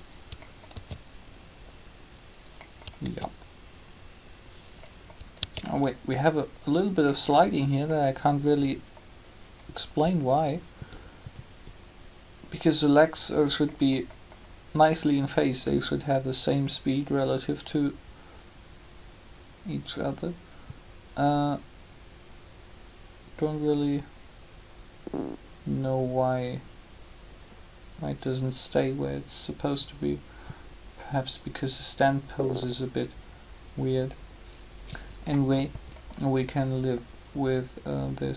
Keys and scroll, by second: 0.7 alt+a, 2.9 alt+a, 5.4 alt+a.